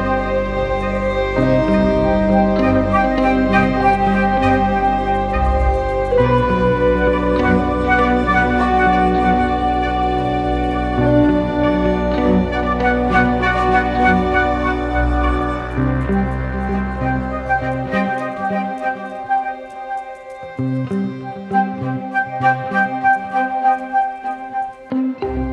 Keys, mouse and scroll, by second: 7.7 ctrl+t, 12.3 Return, 13.0 Down, 13.4 Left, 14.2 Left, 14.4 Left, 14.6 Left, 16.1 Left, 16.3 Left, 17.8 Right, 22.1 ctrl+=, 22.3 ctrl+=, 22.4 ctrl+=, 23.0 space.